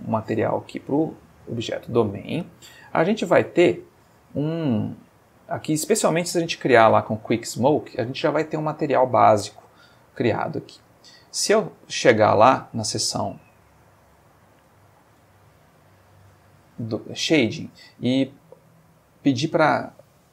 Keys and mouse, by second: 2.8 click, 3.6 click, 10.7 click, 12.4-13.3 middle drag, 14.1 middle click, 14.9 ctrl+middle click, 15.5-16.8 ctrl+middle drag, 20.1 click.